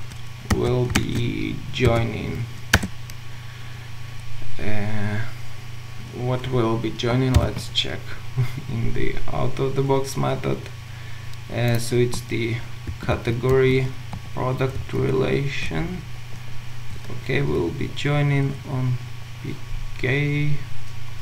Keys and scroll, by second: 0.9 shift+Return, 6.8 Return, 7.4 ctrl+u, 12.9 ctrl+w, 14.8 ctrl+c.